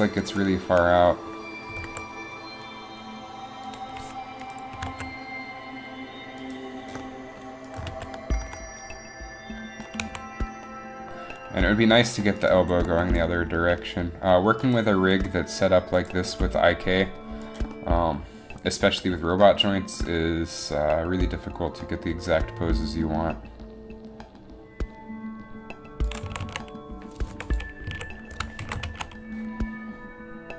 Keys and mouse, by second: 1.9 g, 4.9 r, 8.0 alt+r, 10.1 a, 12.1 alt+r, 12.1 a, 13.1 r, 15.3 r, 16.3 r, 22.3 r, 26.4 a, 26.5 a, 27.4 i, 28.0 a, 28.8 shift+Left, 28.9 alt+a.